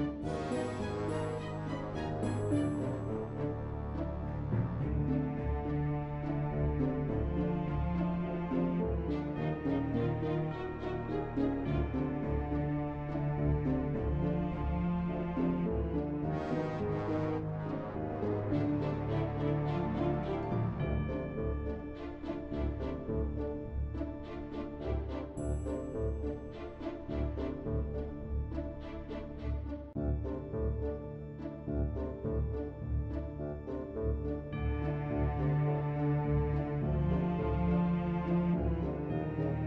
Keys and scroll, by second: 7.4 b.